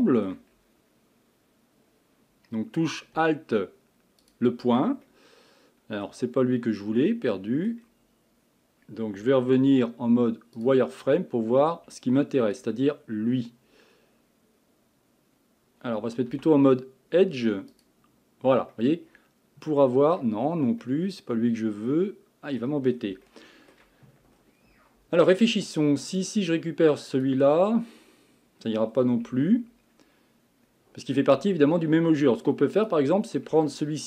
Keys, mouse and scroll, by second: 0.0 shift+middle click, 0.5 scroll up 1, 4.2 alt+click, 5.1-6.4 middle drag, 6.4-6.7 scroll up 1, 6.7-9.6 middle drag, 9.6 z, 11.9-15.1 middle drag, 16.3 2, 17.7 alt+click, 18.7-20.4 middle drag, 20.4-20.8 scroll down 1, 20.8-22.9 middle drag, 22.9-23.3 scroll down 3, 23.3-24.3 shift+middle drag, 24.3-26.2 scroll down 2, 26.2 click, 28.4-28.9 scroll up 1, 28.9-29.3 scroll down 1, 29.3 Tab, 30.7-31.4 scroll up 2, 31.4 Tab, 32.1 Tab, 32.7 click, 33.5 Tab.